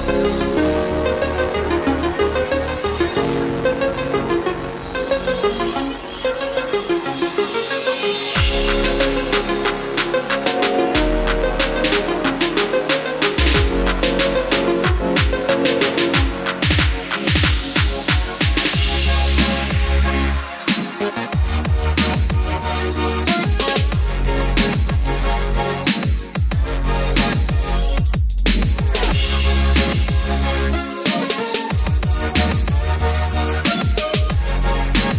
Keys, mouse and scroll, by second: 1.6 click, 2.4 F4, 7.7-15.1 drag, 15.6 Right, 16.2-18.1 typing, 20.8-27.3 drag, 29.4-30.3 scroll down 1, 30.3-32.9 scroll up 1, 32.9-35.1 drag.